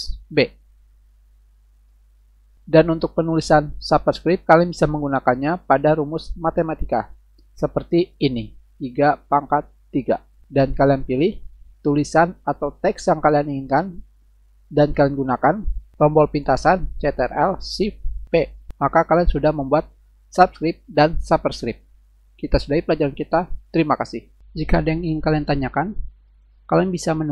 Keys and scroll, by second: 0.4 ctrl+shift+b, 6.3 Return, 8.8 3, 10.1 3, 11.4 shift+Left, 18.3 ctrl+shift+p.